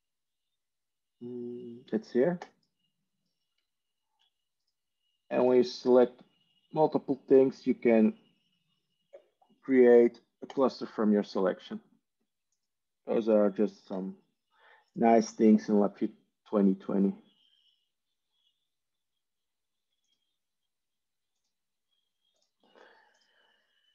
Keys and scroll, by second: 5.6 Tab, 13.8 ctrl+z.